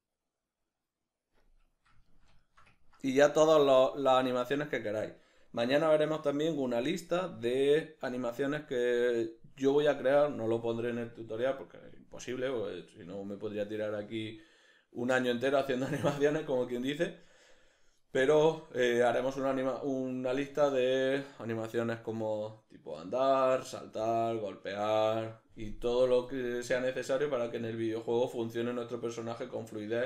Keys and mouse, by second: 0.8-3.8 middle drag, 4.1 Escape.